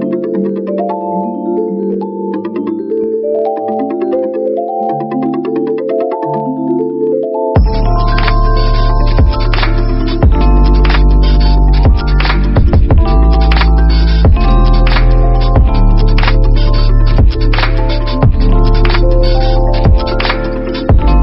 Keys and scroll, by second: 0.9 space, 1.3 shift+d, 2.1 a, 11.3 v, 18.3 ctrl+=, 18.8 space.